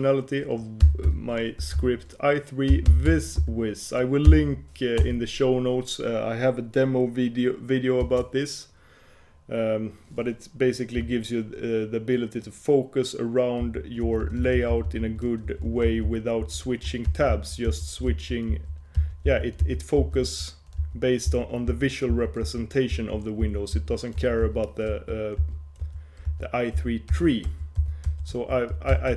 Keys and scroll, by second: 13.7 shift+super+j, 14.2 shift+super+k, 15.6 shift+super+l, 16.0 shift+super+j, 16.5 shift+super+h, 17.0 shift+super+l, 17.2 shift+super+j, 17.8 shift+super+k, 18.1 shift+super+l, 18.3 shift+super+k, 18.6 shift+super+j, 19.4 shift+super+h, 19.7 shift+super+j, 20.1 shift+super+k, 20.3 shift+super+l, 20.9 shift+super+j, 21.4 shift+super+h, 21.8 shift+super+j, 22.2 shift+super+k, 22.8 shift+super+l, 23.0 shift+super+k, 23.5 shift+super+h, 23.9 shift+super+j, 24.3 shift+super+l, 24.5 shift+super+h, 25.0 shift+super+k, 25.5 shift+super+j, 25.9 shift+super+l, 26.4 shift+super+k, 27.2 shift+super+j, 27.6 shift+super+l, 27.9 shift+super+h, 28.2 shift+super+k, 28.4 shift+super+l, 28.8 shift+super+k, 29.0 shift+super+j.